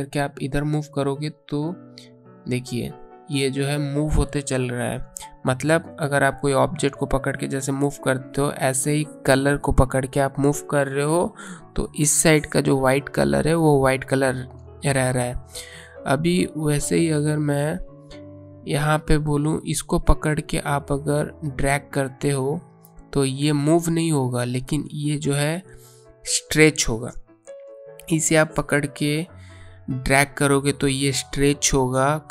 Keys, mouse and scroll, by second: 10.1 click, 16.7 space, 17.1 click, 17.2 space, 21.2 click, 27.1-28.5 alt+scroll down 2, 30.1 click.